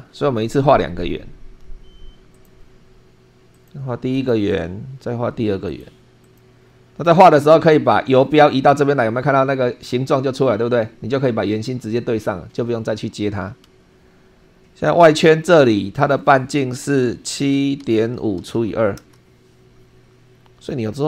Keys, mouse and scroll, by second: 2.3 click, 3.5 click, 4.1 click, 5.7 click, 6.2 click, 13.6 Escape, 14.8 click, 16.0 click, 17.3-18.5 typing, 19.0 Return, 20.3-20.8 scroll up 2.